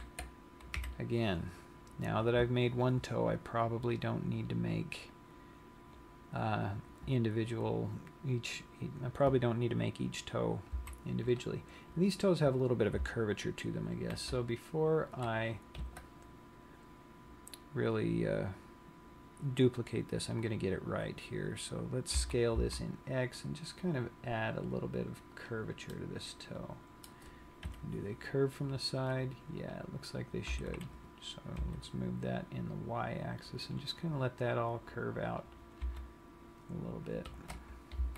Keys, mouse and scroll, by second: 1.0 KP_1, 11.1 z, 14.5 ctrl+r, 22.6 s, 25.9 click, 26.5 middle click, 28.1 KP_3, 29.8 click, 31.0 g, 34.0 click, 35.7 click, 36.4 g.